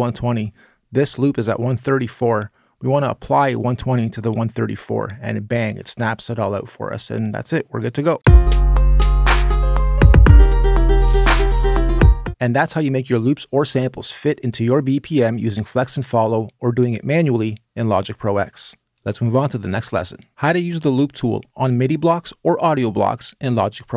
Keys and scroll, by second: 7.9 space, 12.1 space.